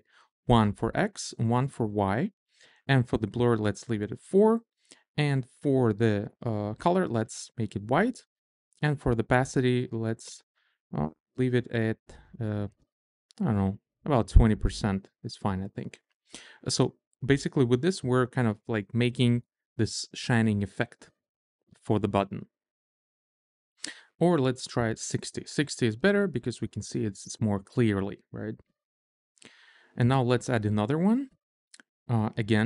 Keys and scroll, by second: 1.1 1, 2.4 1, 10.4 Down, 11.6 Up, 13.1 Down, 15.2 Up, 24.3-25.2 typing, 25.4 Return.